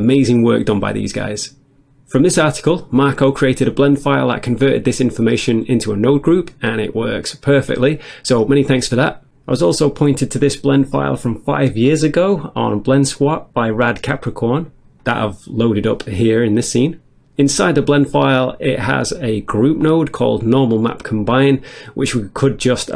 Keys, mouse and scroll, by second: 5.2 click, 11.5 click, 13.9 click.